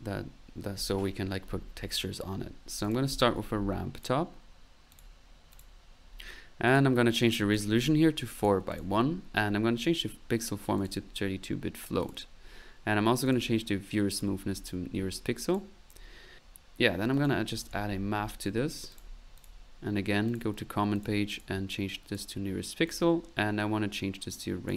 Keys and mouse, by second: 2.7 click, 2.8-3.6 typing, 4.0 click, 4.9 click, 5.6 click, 6.0 middle click, 6.7 click, 7.3 click, 8.3 click, 8.7 click, 9.8 click, 10.2 click, 10.8 click, 12.0 click, 13.3 click, 14.1 click, 15.0 middle click, 15.4 click, 17.1 right click, 17.4-18.1 typing, 18.9 click, 19.4 click, 20.3 click, 21.0 click, 21.3 click, 21.9 click, 22.8 click, 24.4 click.